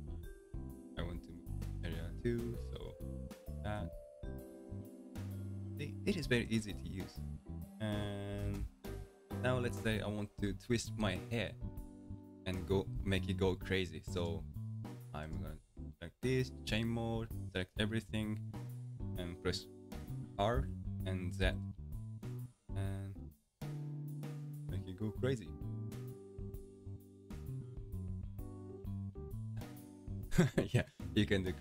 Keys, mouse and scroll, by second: 1.0 alt+a, 1.8 ctrl+click, 3.0-4.7 middle drag, 4.7 g, 6.8-8.5 middle drag, 8.5 alt+a, 8.8-9.8 middle drag, 9.8-11.1 ctrl+scroll down 9, 11.5-13.5 ctrl+scroll down 5, 14.1-15.8 drag, 15.8-18.8 middle drag, 20.6 r, 29.7-31.6 middle drag.